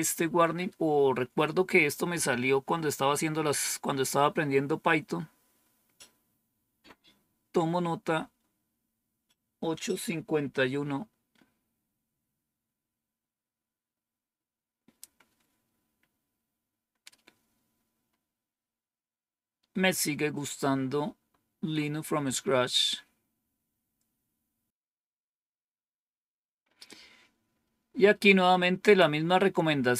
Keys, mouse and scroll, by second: 16.8-17.6 scroll up 1, 17.6-19.1 scroll up 1, 19.1-20.4 scroll up 1, 20.4 scroll up 1, 22.4-23.2 scroll down 2, 23.2-24.7 scroll down 2, 29.1-29.9 scroll up 2.